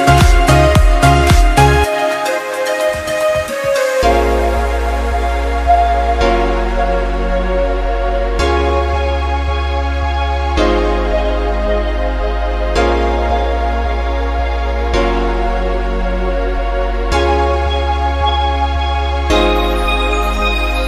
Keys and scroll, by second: 2.3 ctrl+-, 10.0 ctrl+0.